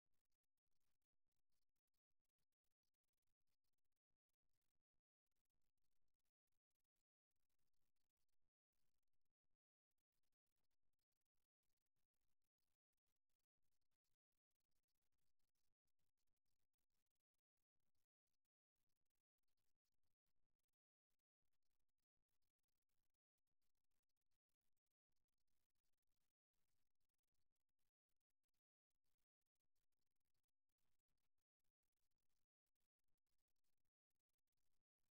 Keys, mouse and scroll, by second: 3.1-4.9 middle drag, 8.5 middle click, 9.5 click, 10.7-12.5 right drag, 11.4-12.9 drag, 12.9-14.9 middle drag, 14.9 right click, 16.5 middle click, 17.4 click, 17.8 middle click, 19.4-21.2 middle drag, 21.6 Tab, 22.7 Tab, 23.1-26.9 middle drag, 29.1-35.1 middle drag.